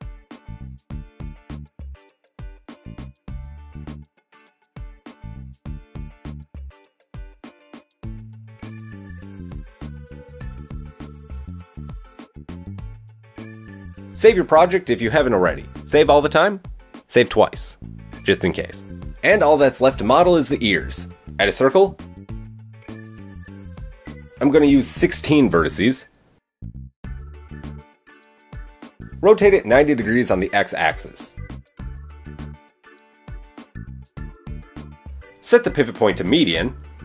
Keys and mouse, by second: 0.2-2.1 middle drag, 0.2-2.1 right drag, 2.4 middle click, 2.4 right click, 4.3 KP_3, 5.0 KP_1, 5.6 middle click, 5.6 right click, 7.6-12.3 middle drag, 12.3 click, 12.4-14.6 shift+middle drag, 14.6-15.8 drag, 16.1-17.2 middle drag, 16.1 KP_1, 17.2-18.9 shift+drag, 18.9-24.3 middle drag, 21.3 shift+a, 24.3 click, 27.9 Tab, 28.4 r, 32.4 KP_1.